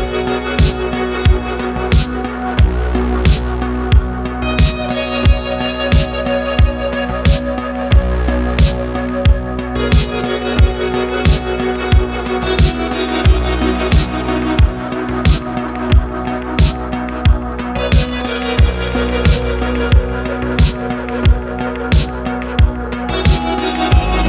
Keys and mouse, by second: 1.0 z, 2.9 Escape, 3.8 KP_3, 7.7-8.0 middle drag, 8.8 middle click, 10.2 n, 11.2 n, 12.4 shift+a, 16.0 ctrl+z, 17.5 shift+c, 20.6 shift+a, 22.5 middle click, 23.0 middle click.